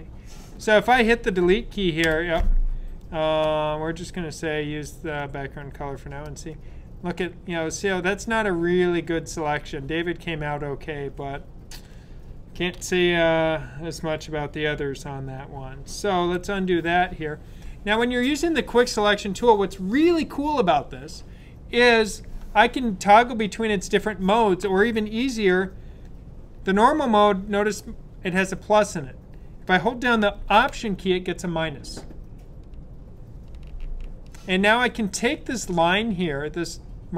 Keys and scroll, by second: 16.1 super+z.